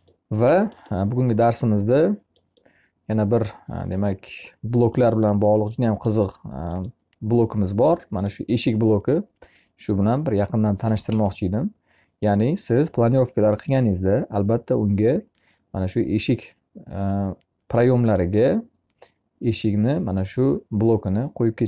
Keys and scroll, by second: 10.4 Escape.